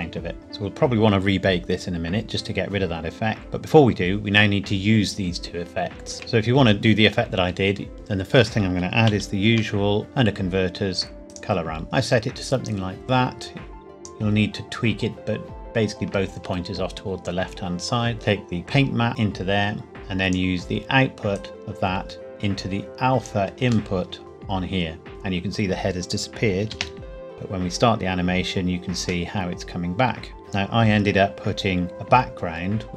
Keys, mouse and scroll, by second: 0.4-0.7 scroll down 1, 3.4 click, 6.1 shift+middle click, 6.4-8.8 scroll up 1, 9.0-9.5 shift+scroll up 1, 9.5 shift+a, 11.2 click, 18.6 click, 23.9 shift+middle click, 26.7 space, 28.4-29.2 scroll down 1, 29.2 middle click, 30.4-30.8 scroll down 1, 31.9 shift+a.